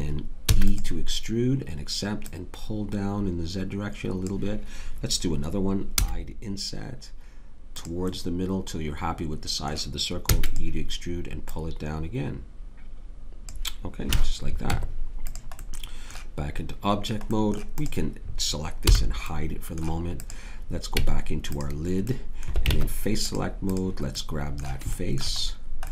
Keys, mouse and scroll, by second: 0.4 e, 6.0 i, 10.2 e, 12.1-13.4 drag, 14.1 a, 14.6 Tab, 18.9 h, 20.9 Tab, 22.7 ctrl+Tab.